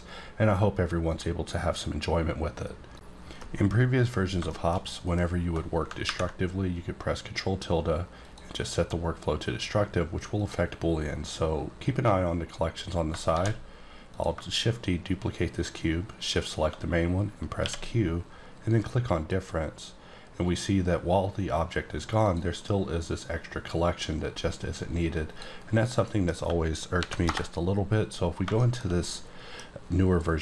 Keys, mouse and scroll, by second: 1.0 click, 4.4 shift+Num_Lock, 4.4 shift+middle click, 5.2-6.0 scroll up 4, 8.2 click, 10.3 click, 13.1 shift+Num_Lock, 13.2 shift+d, 14.1 click, 16.2 shift+click, 17.6 q, 19.1 click, 22.2 click, 22.6 right click, 23.8 click, 25.2 click, 26.0 middle click, 26.9 ctrl+n, 27.3 Return, 28.0-28.5 scroll up 4, 28.5 middle click, 29.0 middle click.